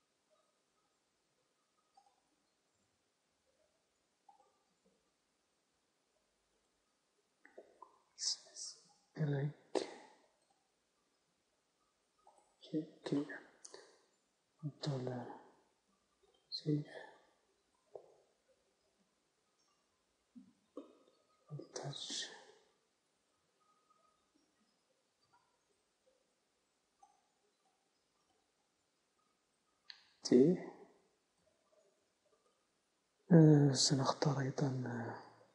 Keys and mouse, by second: 2.8-4.3 drag, 3.0 g, 4.9-6.5 drag, 4.9 s, 7.7-8.8 drag, 7.7 s, 11.2 s, 11.5-15.3 drag, 11.5 g, 14.6 ctrl+z, 16.3 ctrl+s, 18.3 z, 18.7 z, 19.0 z, 20.5 Tab, 22.3 alt+h, 22.9 z, 25.3 a, 25.8 alt+h, 27.1 alt+h, 27.8-30.7 drag, 28.5 a, 30.7 t, 33.7-35.2 middle drag.